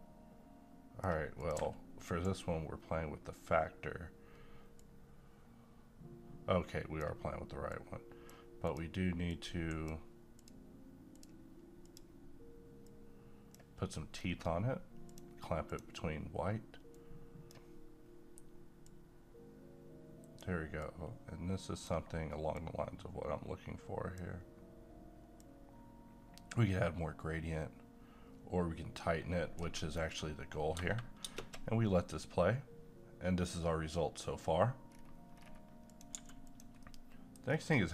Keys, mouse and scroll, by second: 4.8-8.6 drag, 9.4 q, 10.4-14.1 drag, 14.1 scroll up 1, 15.1-30.1 drag, 30.1 scroll down 1, 31.2 shift+space, 34.9 scroll down 1, 35.9 click, 36.1 g, 36.5 click, 36.8 middle click, 37.5-37.9 scroll down 1.